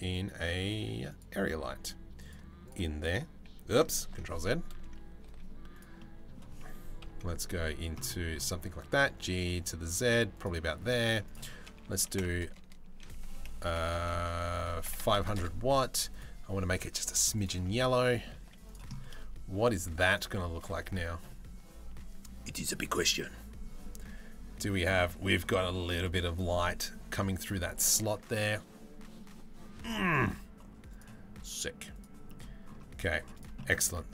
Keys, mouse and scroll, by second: 1.1 g, 2.0 z, 3.7 ctrl+z, 4.3 KP_Decimal, 4.8 z, 5.6 middle click, 6.6 KP_3, 8.4 g, 10.9-12.1 drag, 12.1 KP_0, 13.3 BackSpace, 13.6 BackSpace, 14.7 KP_0, 15.7 click, 17.6 middle click, 18.0 z, 22.1-23.6 right drag, 24.3 middle click, 25.6 right click, 30.5 middle click, 31.9 middle click, 33.2 middle click, 33.4 Tab, 33.7 middle click.